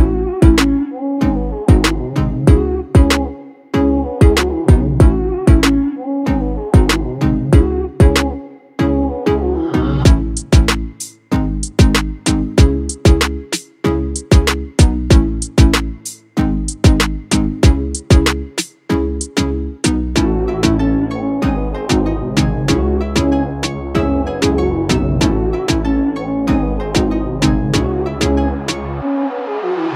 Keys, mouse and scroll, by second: 0.5 alt+scroll up 1, 1.6 click, 2.8 alt+scroll up 1, 5.3 click, 7.8 alt+click, 10.8 alt+click, 12.3-13.0 alt+scroll up 3, 13.3 space, 13.7-14.1 click, 13.9 space, 16.5-16.8 click, 21.8 click, 23.5 alt+click.